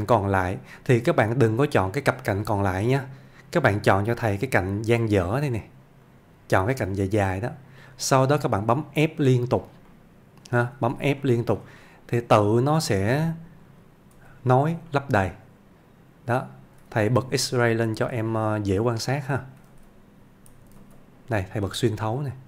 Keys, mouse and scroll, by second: 5.0 middle click, 6.1 click, 6.8-8.0 middle click, 8.8 scroll up 1, 9.3 f, 9.9-10.6 middle click, 10.7 f, 11.3-12.8 shift+middle click, 14.2 f, 14.9-16.5 middle click, 17.0 ctrl+z, 18.5-19.1 middle click, 19.7 ctrl+z, 20.8 alt+z, 21.2-21.5 scroll up 1, 21.7-22.4 middle click.